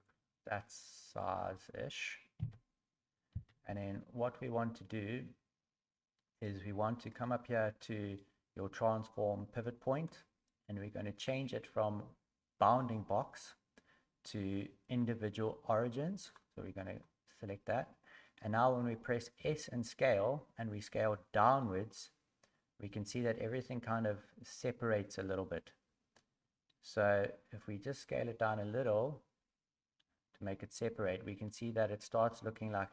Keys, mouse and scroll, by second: 0.7 middle click, 1.6 middle click, 2.4 KP_1, 3.3 KP_3, 9.9 click, 19.4 s.